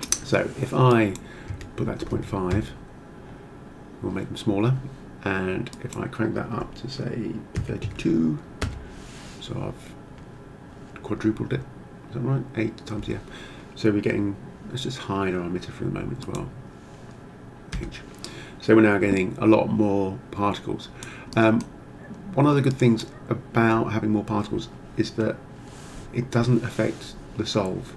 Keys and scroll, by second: 1.5 ., 2.2 5, 2.6 Return, 7.6 3, 7.9 2, 8.7 Return, 17.8 h.